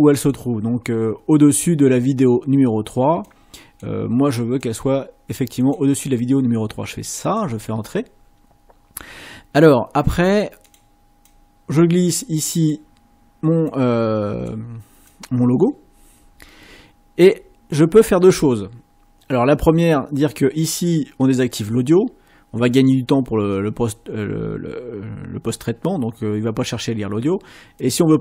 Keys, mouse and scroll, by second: 10.6 click, 11.2-12.9 drag, 13.6 click, 15.1 click, 21.4 click.